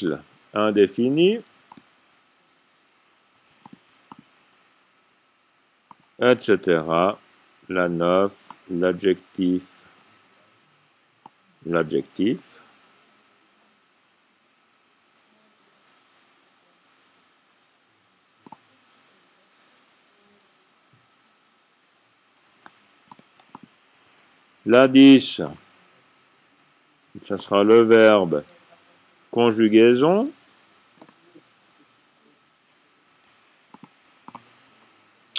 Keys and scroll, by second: 0.3 c, 2.2-2.9 typing, 4.8-5.5 typing, 15.2 c, 19.4 v, 24.5 a, 29.5 c, 31.8 typing, 34.4-35.1 typing.